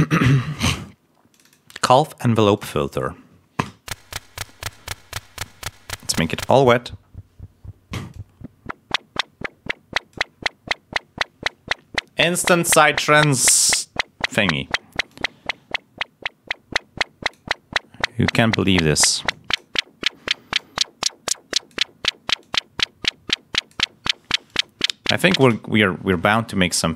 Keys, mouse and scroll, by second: 1.2 click, 2.5 click, 3.6 l, 4.0 click, 6.2 click, 8.0-10.2 drag, 15.0 click, 20.5-21.8 drag, 22.3-23.8 drag, 24.4 click.